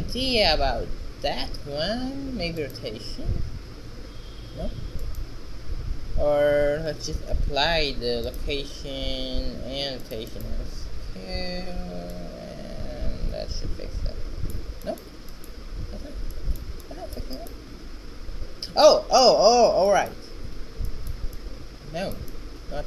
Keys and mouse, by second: 0.2 r, 1.5 r, 5.6 ctrl+a, 8.9-10.8 drag, 10.8-12.4 middle drag, 13.5-14.6 middle drag, 14.6 shift+z, 19.3 shift+z, 21.8 shift+z.